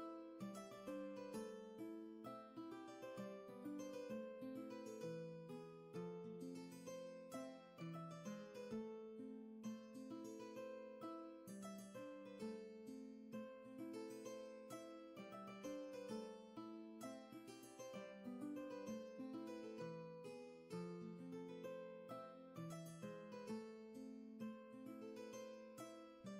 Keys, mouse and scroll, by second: 12.1 space, 19.8 ctrl+z, 23.1 ctrl+z, 23.7 space.